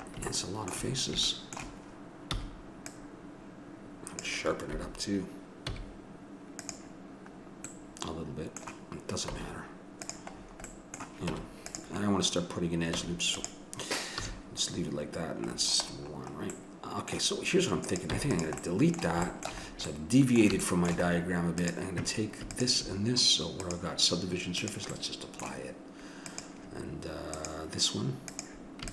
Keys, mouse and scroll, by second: 2.3 c, 5.7 x, 9.3 Tab, 11.3 Tab, 13.0 Tab, 14.1 a, 17.8 right click, 18.1 x, 18.6-19.7 right drag, 21.6-23.6 right drag, 24.6 click, 25.0-26.2 middle drag, 26.3-27.3 middle drag, 27.3-28.9 drag.